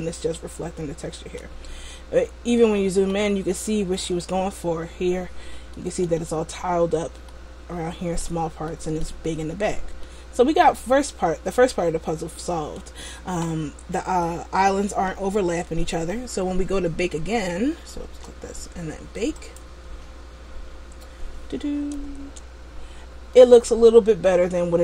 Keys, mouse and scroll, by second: 1.9-2.6 scroll up 3, 2.7 middle click, 3.7 middle click, 5.9 middle click, 7.4 middle click, 8.8 middle click, 9.7-11.1 scroll down 2, 10.1 middle click, 15.0 Tab, 15.5 Tab, 18.3 Tab, 19.5 click, 22.2 Tab, 23.1-23.4 scroll down 1, 23.4 middle click.